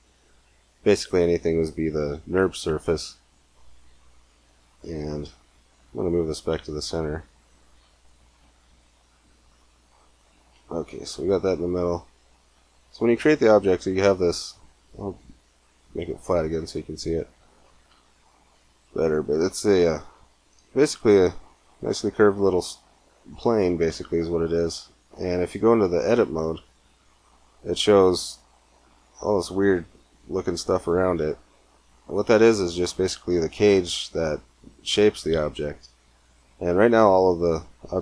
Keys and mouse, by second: 4.5 shift+s, 7.6 shift+s, 15.4-17.2 drag, 17.0-18.2 middle drag, 19.6 middle click, 19.8 KP_Decimal, 25.9 Tab, 29.6 middle click, 36.5-37.5 middle drag, 37.5 a.